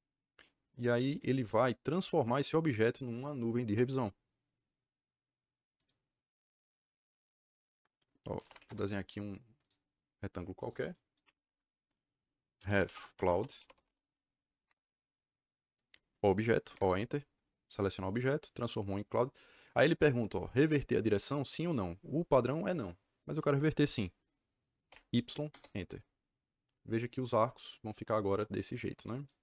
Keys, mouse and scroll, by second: 5.7 click, 8.0-9.0 typing, 9.5 click, 10.5 click, 11.2 Escape, 11.3 Escape, 12.3-14.3 typing, 14.6 Return, 16.6 o, 16.7 KP_Enter, 17.7 click, 24.8 y, 25.4 KP_Enter.